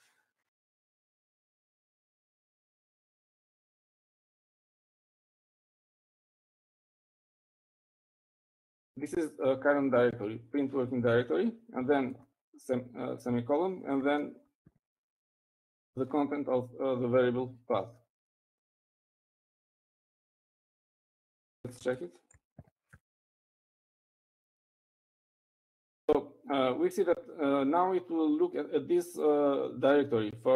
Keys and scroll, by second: 3.2-5.1 typing, 6.9-9.8 typing, 8.6 shift+Left, 13.0 Right, 13.3 :, 15.4-17.6 typing, 21.7-25.6 typing, 27.1-27.8 typing.